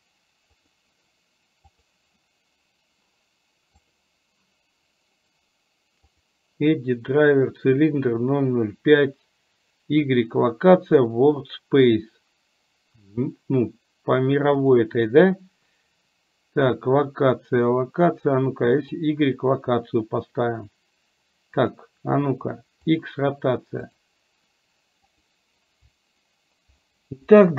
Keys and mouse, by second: 1.9 click, 23.9 click, 25.0 right click.